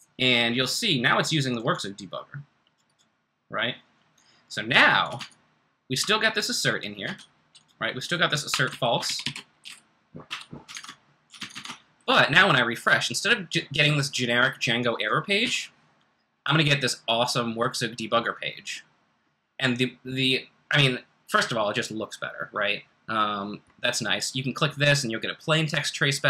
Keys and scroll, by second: 5.2 super+Tab, 7.0 `, 8.5 Escape, 8.7-10.1 typing, 10.7 Escape, 11.3 super+Tab, 11.5 super+Tab, 15.4 r.